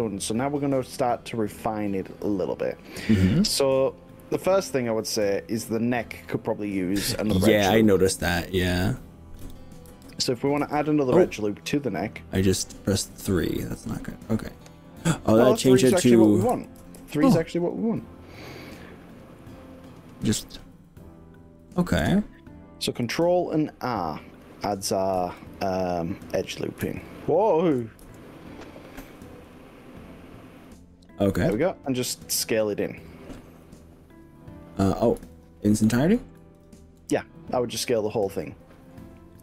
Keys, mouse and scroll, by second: 0.0-6.0 middle drag, 9.4 KP_3, 10.0 3, 10.8 3, 13.2 1, 14.0-14.8 scroll up 4, 15.8-17.0 typing, 17.8 click, 23.2 g, 25.2 r, 26.4 click, 27.0 ctrl+z, 28.0 ctrl+r, 30.6 right click, 31.6 click, 33.7 click, 35.4 shift+click, 36.6 shift+click, 37.1 middle click, 38.2 shift+click, 38.4 middle click.